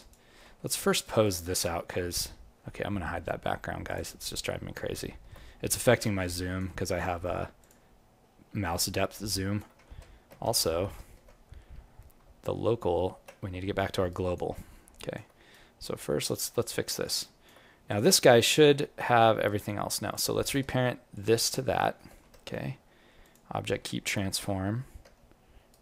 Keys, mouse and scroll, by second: 0.5 alt+middle click, 0.8 alt+right click, 1.2 alt+click, 2.0 scroll down 1, 3.6 scroll down 11, 3.8 click, 4.3-4.6 scroll down 1, 4.9 scroll down 1, 5.0 alt+middle click, 5.4-5.7 scroll up 1, 6.3 right click, 6.3 scroll up 13, 6.9 alt+middle click, 7.6 click, 7.9-8.2 scroll up 1, 8.2 scroll down 1, 8.7 scroll down 7, 8.8 alt+click, 9.9 ctrl+z, 11.7-12.1 scroll up 2, 12.4 alt+q, 13.7 alt+middle click, 14.1 alt+right click, 14.5 alt+click, 15.5 right click, 16.1 click, 16.6 alt+click, 17.2 right click, 17.8 click, 18.6 g, 20.1 click, 21.1 shift+click, 22.2 ctrl+p, 23.8 alt+click, 24.3 click, 25.0 g.